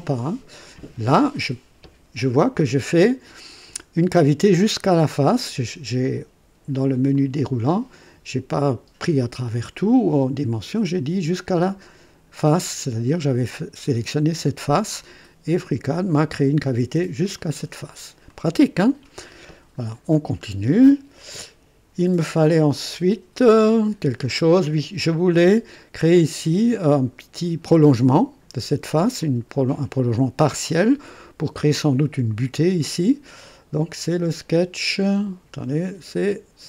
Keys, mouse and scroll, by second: 7.1 click, 12.4 click, 17.3 click, 18.3-19.3 drag, 20.1 scroll down 1, 20.7 click, 22.2 scroll down 1, 25.1-26.0 drag, 29.2-30.1 drag, 30.8 click.